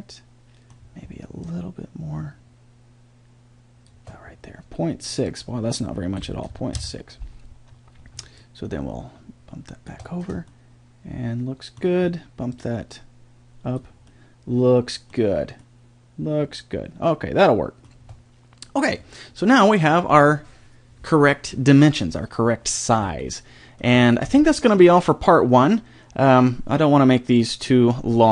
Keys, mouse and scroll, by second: 1.4 click, 5.3-7.0 drag, 8.4-10.5 drag, 10.5-12.5 middle drag, 12.5 click, 14.1-14.5 middle drag, 17.6 middle click, 19.0-21.0 middle drag, 23.2-25.1 middle drag.